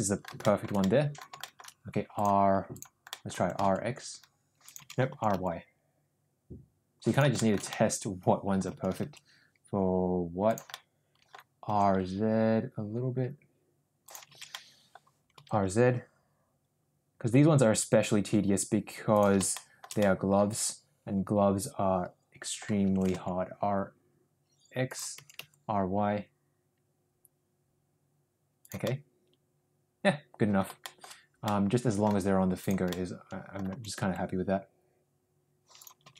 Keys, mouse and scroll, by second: 0.3 shift+middle click, 0.7-1.2 middle drag, 1.4 shift+middle drag, 2.1 click, 2.8 click, 3.0 middle click, 3.3 r, 5.0 ctrl+z, 5.0 r, 7.3 shift+middle click, 7.7 scroll up 1, 7.8 middle click, 8.7 r, 10.7 scroll up 1, 10.7-11.3 middle drag, 11.7 r, 14.6 ctrl+z, 14.6 middle click, 15.3 r, 19.4-19.8 shift+middle drag, 20.0-22.7 middle drag, 22.8 r, 25.1 r, 28.8-30.6 middle drag, 30.8 scroll up 1, 30.8 shift+middle drag, 31.4 scroll up 1, 31.5 middle click, 32.7 click, 32.9-33.5 middle drag, 33.7 r.